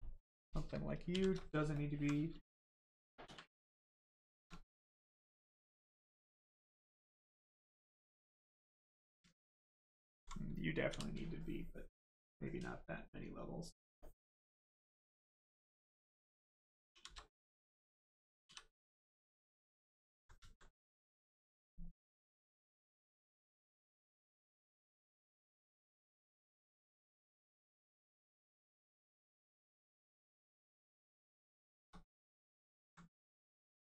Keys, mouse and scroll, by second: 1.0 shift+d, 1.7 alt+click, 3.2 shift+d, 4.6 click, 6.0 alt+click, 9.6 alt+click, 10.8 d, 12.2 click, 14.8 alt+click, 16.8 shift+d, 18.4 d, 19.8 alt+click, 20.4 alt+right click, 21.9 right click, 22.0 click, 25.1 click, 28.3 click, 30.0 right click, 31.6 shift+right click, 32.0 alt+right click, 33.2 right click, 33.3 right click.